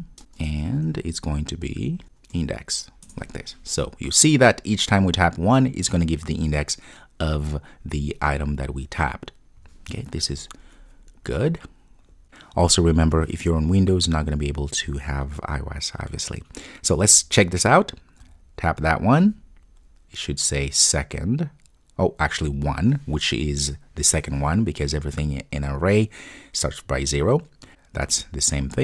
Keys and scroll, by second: 3.1 Return, 10.3 super+s.